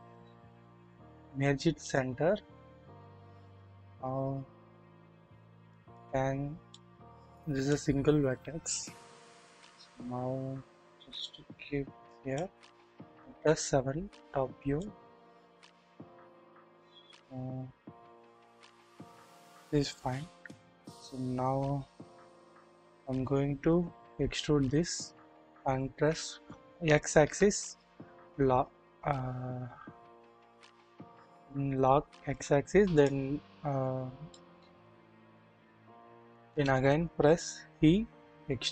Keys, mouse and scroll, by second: 3.5 click, 5.7 click, 6.7-7.8 drag, 7.9-9.0 scroll up 2, 9.0 KP_1, 9.8-11.2 scroll up 1, 11.2 click, 12.1 middle click, 12.1 scroll up 1, 13.3 KP_7, 14.8-18.6 middle drag, 14.8-16.3 scroll up 1, 16.3-18.6 scroll up 1, 20.1 KP_1, 22.9 e, 25.6 typing, 27.2 typing, 34.0 scroll down 1, 34.3-34.7 shift+middle drag, 34.8-35.3 scroll up 1, 35.3 scroll down 1, 35.9-36.4 shift+middle drag, 37.4 typing.